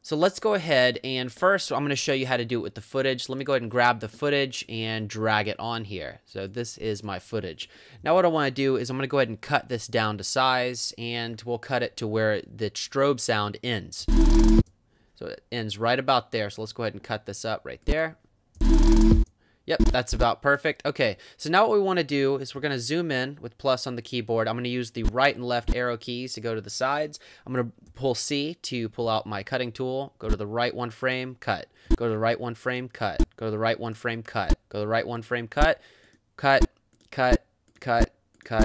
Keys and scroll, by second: 8.0 =, 14.0 space, 18.6 space, 22.6 =, 25.0 Right, 25.6 Left, 27.9 c, 30.2 Right, 31.9 Right, 33.2 Right, 34.4 Right, 35.6 Right.